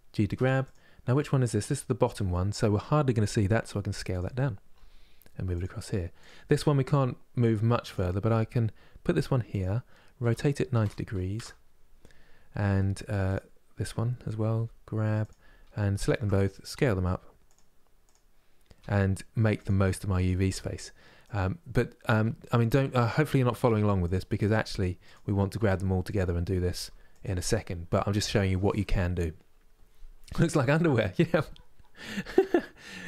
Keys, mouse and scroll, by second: 3.2 s, 4.4 g, 5.9 click, 7.6 click, 8.1 g, 10.0 r, 12.3 g, 13.5 click, 14.2 g, 15.7 shift+click, 16.4 s, 17.8 click, 18.5 g, 19.9 click, 20.2 g, 21.8 s, 23.1 g, 24.1 click, 24.8 click, 25.3 s, 26.4 g, 31.7-33.0 middle drag.